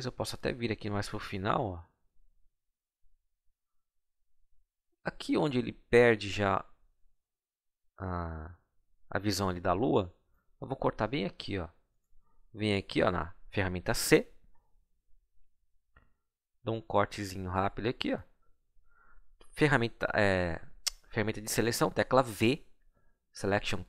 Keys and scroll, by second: 13.9 c, 22.3 v.